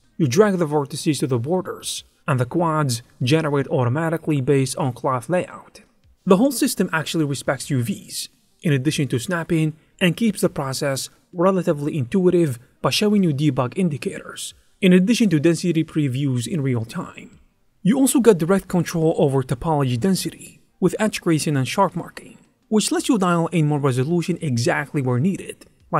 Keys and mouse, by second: 0.2 click, 0.2-2.9 typing, 0.9 ctrl+z, 0.9 ctrl+r, 1.5 click, 3.3 Tab, 3.4 click, 3.9 click, 4.5 Tab, 4.7 ctrl+r, 4.8 click, 5.1-10.5 typing, 5.4 ctrl+r, 6.3 click, 7.0 click, 8.0 click, 9.6 click, 10.6 click, 10.9 shift+click, 12.2 click, 12.2 g, 12.5 ctrl+r, 12.5 click, 12.7 ctrl+r, 13.1 g, 13.6 ctrl+r, 14.1 ctrl+r, 14.2 click, 14.4-22.6 typing, 15.3 ctrl+r, 15.3 ctrl+click, 15.5 ctrl+z, 15.6 ctrl+r, 16.0 click, 18.4 ctrl+r, 21.3 ctrl+r, 21.4 click, 22.0 click, 22.3 click, 23.7-25.9 typing, 24.2 ctrl+r, 24.2 click, 24.5 click, 24.7 click, 25.5 click.